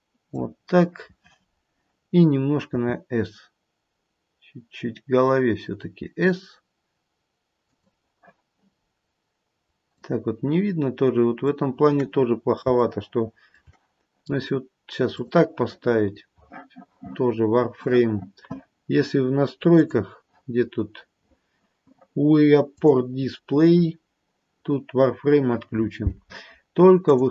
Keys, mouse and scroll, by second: 1.3-3.0 scroll up 2, 3.0 s, 8.9-9.5 scroll down 1, 9.8 click, 12.6 scroll up 2, 12.8 shift+middle click, 13.5 shift+middle click, 15.3 click, 19.7 click, 20.5-22.3 scroll down 4, 22.6 click, 23.1-23.7 scroll down 1, 23.7 scroll down 3, 27.2 click.